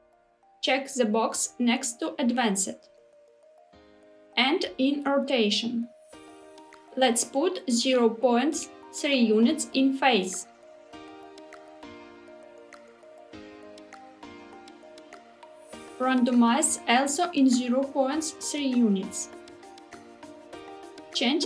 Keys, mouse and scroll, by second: 2.3 click, 5.8 click, 7.3 click, 10.3-15.6 drag, 16.1-19.9 drag, 21.1-21.4 drag.